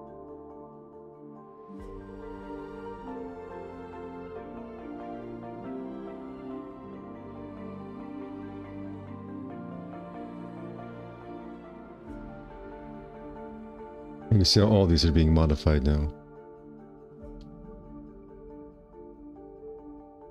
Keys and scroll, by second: 3.4 r, 7.3 w, 10.7 5, 10.9 q, 12.1 5, 12.6 F4, 14.4 F4, 18.1 4.